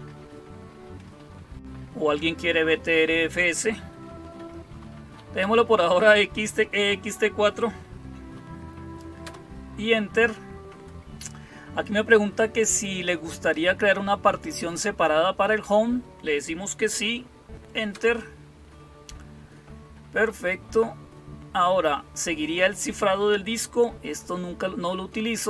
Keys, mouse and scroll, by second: 4.8 Up, 5.2 Down, 9.1 Return, 17.7 Return.